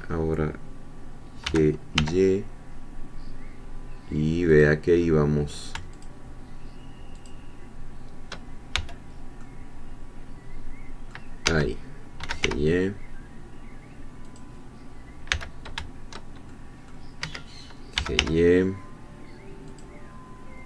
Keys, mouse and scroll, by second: 1.5 g, 1.9 y, 4.5 click, 6.0-7.5 shift+drag, 8.7 shift+c, 9.4-11.3 middle drag, 11.5 Escape, 12.0-12.9 typing, 14.3 click, 15.3 c, 16.5 shift+middle click, 17.2 Escape, 17.7-18.7 typing, 19.7-20.6 drag.